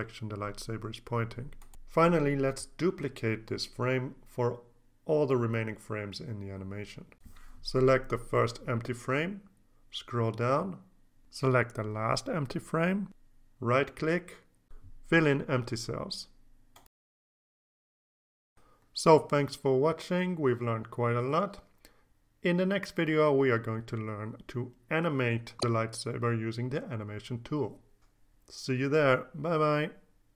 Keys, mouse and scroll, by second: 4.7 click, 9.1 click, 9.9-11.5 scroll down 9, 12.0 shift+click, 13.1 right click, 15.7 click, 16.5-18.2 scroll up 5.